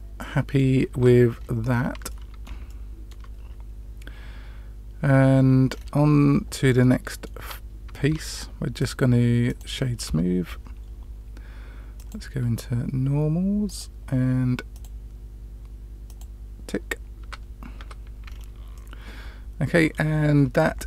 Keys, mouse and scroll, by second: 0.8 Tab, 1.3 scroll up 1, 1.4 scroll down 1, 1.6-2.0 scroll up 3, 2.0 middle click, 2.6-3.0 shift+middle drag, 5.6-6.7 scroll down 2, 6.7-7.2 middle drag, 6.7 scroll down 1, 7.4 Tab, 7.9 scroll down 1, 8.0-8.7 scroll up 1, 8.7 right click, 11.9 click, 13.6 click, 14.7 click, 16.0 click, 17.1 Tab, 17.7 Tab, 18.2-19.1 scroll down 2, 18.7-19.9 middle drag.